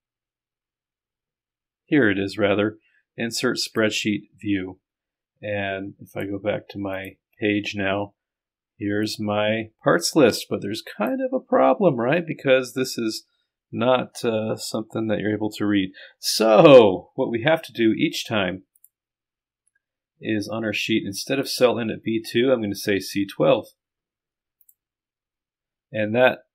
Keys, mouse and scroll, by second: 3.7 click, 6.1 click, 6.9 click, 7.4-9.1 drag, 11.3-13.0 drag, 23.3 KP_2, 25.2-26.5 drag.